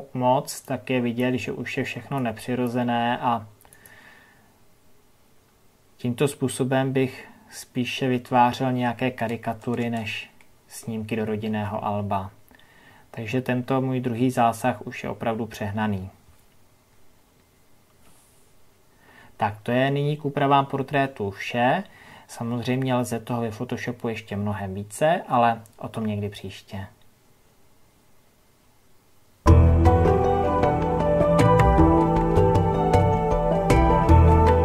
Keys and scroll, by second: 11.3 ctrl+KP_Add, 18.5 ctrl+KP_Subtract.